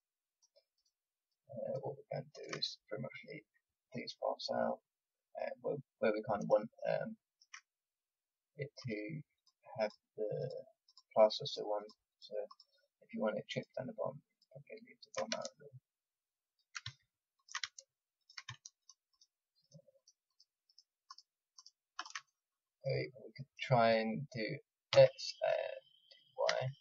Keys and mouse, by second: 5.7-6.8 middle drag, 9.3-26.8 drag, 24.9 s.